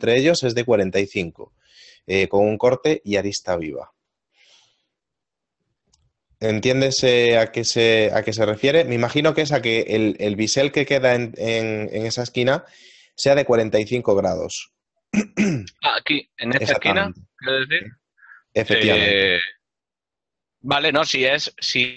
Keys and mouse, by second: 20.6 middle click.